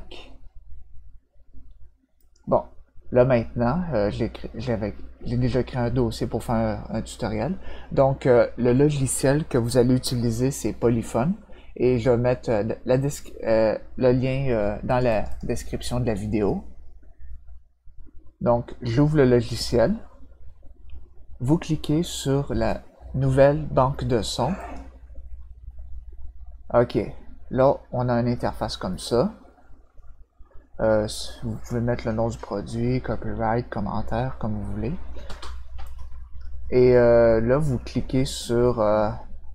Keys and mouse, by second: 2.2 click, 14.9 click, 15.1 click, 15.3-24.7 drag.